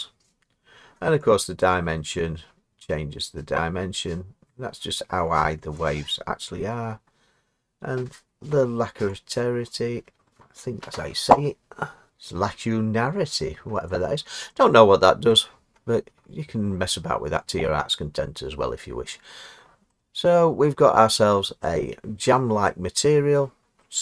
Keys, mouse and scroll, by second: 5.7 click, 13.8 click, 15.3-17.3 scroll, 20.7 middle click, 21.1 scroll, 22.2-23.1 scroll, 23.4-24.0 scroll.